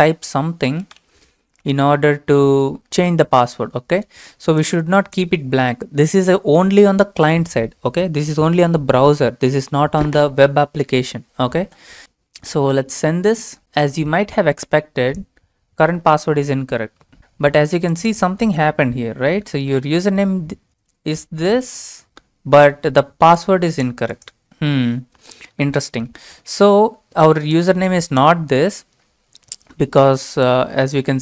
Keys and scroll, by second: 0.5-1.7 typing.